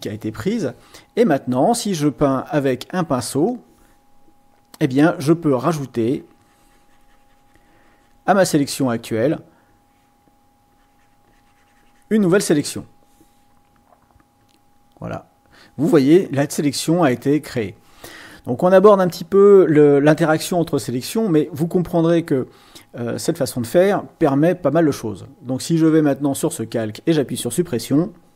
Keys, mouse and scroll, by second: 3.3 click, 5.9 click, 7.5 click, 8.5 click, 9.6 click, 10.7-12.1 drag, 14.3 click, 25.8 click.